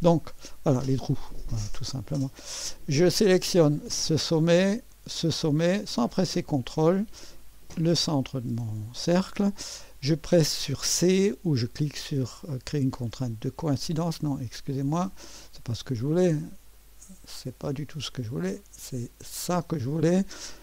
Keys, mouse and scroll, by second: 0.0-3.1 drag, 5.1 click, 7.2 click, 13.0 click, 13.3-15.5 drag, 16.7-20.6 drag.